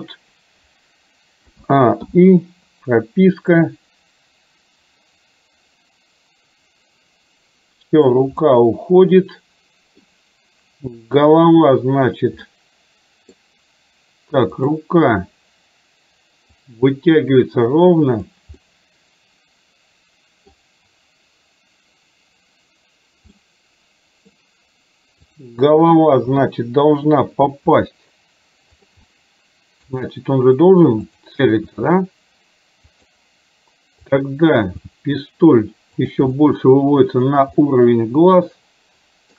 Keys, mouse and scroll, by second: 1.6 a, 2.1 i, 3.7-8.2 drag, 8.6-10.1 middle drag, 11.2 click, 12.6-13.5 middle drag, 14.6 click, 16.7-18.3 drag, 18.6 scroll up 1, 18.8-20.6 middle drag, 23.5 scroll up 1, 23.6-24.3 middle drag, 25.3 click, 26.3 KP_7, 27.8 r, 29.1-30.0 middle drag, 31.1 click, 31.8 r, 34.8 g, 36.5 middle click, 37.7-39.3 middle drag.